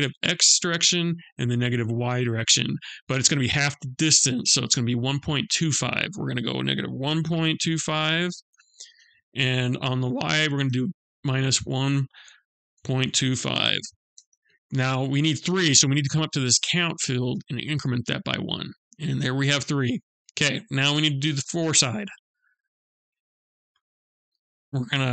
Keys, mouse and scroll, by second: 4.7 click, 17.8 click, 18.8 middle click, 20.2 middle click, 23.4 scroll up 1, 23.5 click.